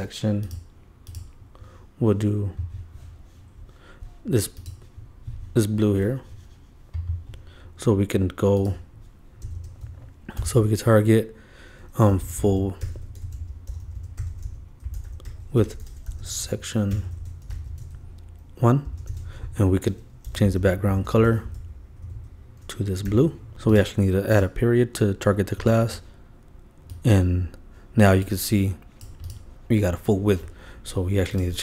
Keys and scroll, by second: 9.8 shift+Return, 10.4 shift+7, 19.0 shift+space, 19.1 shift+[, 19.2 shift+Return, 22.4 super+v, 23.1 super+;.